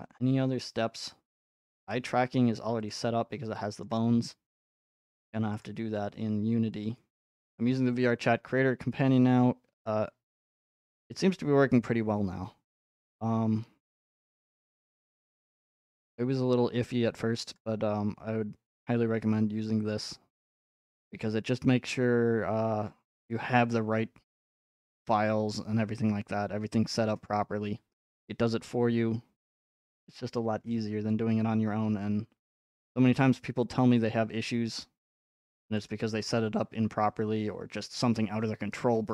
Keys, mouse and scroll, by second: 0.5 scroll, 0.7 middle click, 0.8 middle click, 0.9 middle click, 1.4 scroll, 1.7 ctrl+Tab, 2.9 click, 3.8 shift+scroll, 4.4 scroll, 5.6-7.7 drag, 5.6 middle click, 12.8-15.0 drag, 17.6-35.8 drag, 35.9-38.0 drag.